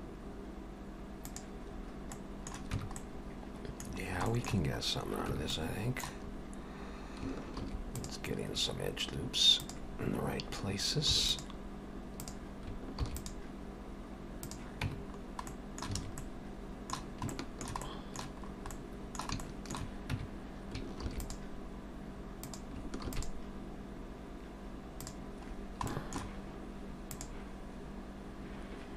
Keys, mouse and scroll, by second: 1.7-2.8 scroll up 3, 2.1 middle click, 2.8 Tab, 3.0 middle click, 4.0-4.3 scroll down 3, 4.3 shift+middle click, 4.8 scroll up 1, 5.3 Tab, 5.5 middle click, 6.3-7.2 scroll up 1, 7.2 scroll up 1, 7.5 ctrl+r, 11.1 ctrl+r, 13.0 ctrl+r, 14.9 Tab, 15.1-15.9 scroll down 2, 15.5 middle click, 16.0 alt+a, 16.2 middle click, 17.3 shift+middle click, 17.9 middle click, 18.5-19.4 scroll up 2, 18.7 middle click, 19.4 middle click, 20.2 Tab, 21.0 ctrl+r, 23.1 ctrl+r, 25.5-25.9 scroll down 2, 25.9 shift+middle click, 27.1 click.